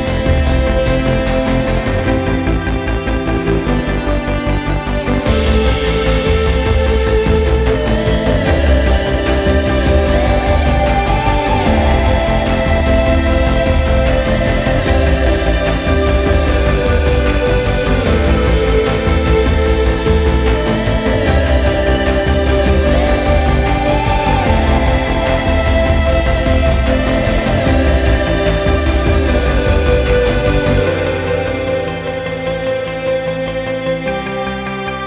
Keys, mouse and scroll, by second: 0.6 right click, 1.4 click, 3.7-4.5 drag, 4.7-5.5 drag, 7.2 ctrl+scroll up 2, 7.6-8.6 ctrl+middle drag, 9.3-10.9 drag, 12.4-14.3 drag, 15.5 click, 16.8 click, 17.7 click, 18.5 click, 20.1-20.7 drag, 21.3 click, 23.2 right click, 24.1 click, 24.9-25.4 drag, 25.7 click, 27.4 click, 28.5-29.3 drag, 29.6 click, 31.3 right click, 32.0 drag, 32.8 click, 33.6 click, 34.5 click.